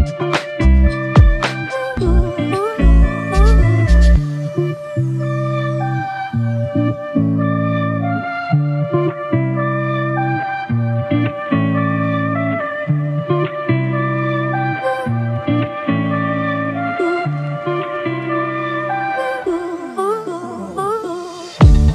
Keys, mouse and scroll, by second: 0.2 alt+click, 1.3 alt+shift+click, 10.5 f, 11.9 double click.